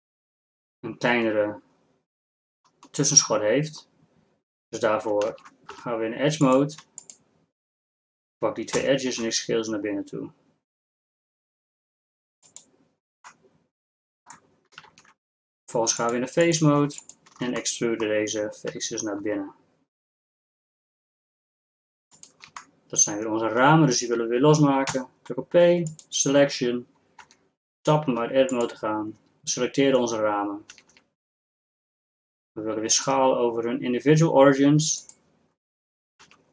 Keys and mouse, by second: 5.3 ctrl+Tab, 8.9 s, 14.0-15.0 drag, 15.0 ctrl+Tab, 18.7 e, 24.9 p, 27.3 Tab, 29.3 Tab, 31.2 a, 31.4 a, 31.5 a, 36.3 s.